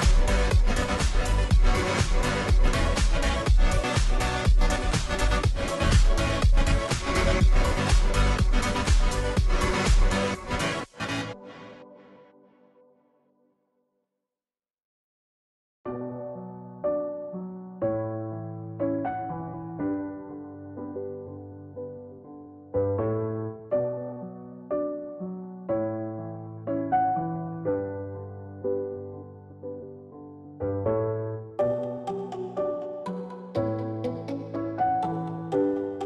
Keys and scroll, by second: 3.2 g, 5.3 ctrl+g, 8.4-10.7 typing, 28.0-29.2 space.